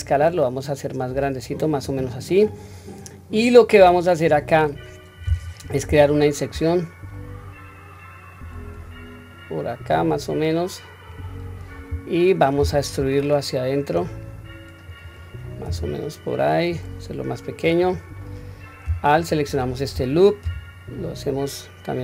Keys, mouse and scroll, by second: 2.3-4.3 middle drag, 19.1 alt+click, 20.4 s.